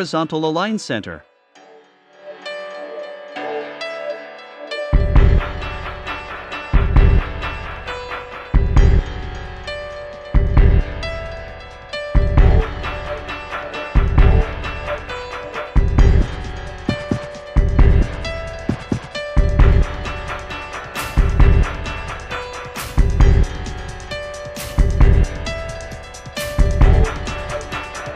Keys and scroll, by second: 14.3 v.